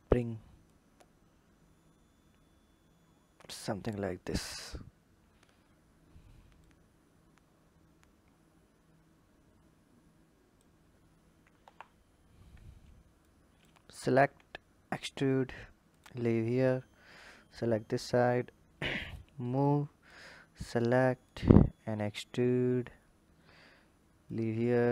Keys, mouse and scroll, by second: 0.5 click, 5.3-6.4 scroll up 2, 6.4 click, 11.4 KP_1, 12.3-13.2 scroll down 1, 13.2 click, 14.1 e, 16.3 click, 17.1 click, 19.4 click, 21.1-22.2 drag, 22.2 e, 24.5 e.